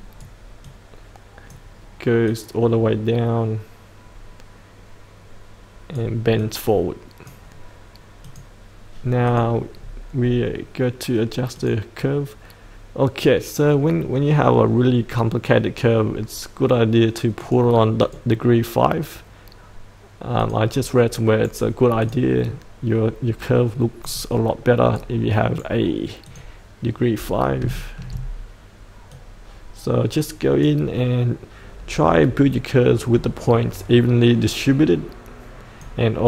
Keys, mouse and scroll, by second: 9.8-10.2 scroll up 1, 10.2-11.5 scroll down 1, 11.5-19.0 drag, 20.8 right click, 22.0 click, 24.9-26.1 right drag, 26.2 click, 27.7 shift+middle click, 29.1-36.2 drag.